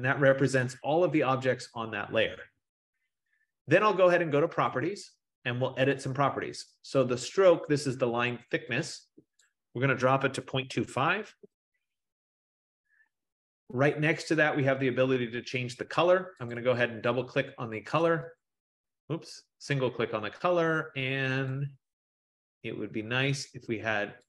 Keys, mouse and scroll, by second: 2.4 F15, 4.7 click, 9.5 click, 10.2-11.2 typing, 11.5 Tab, 16.7 click, 16.8 click, 18.2 click, 18.5 click, 19.2 click, 21.6 click.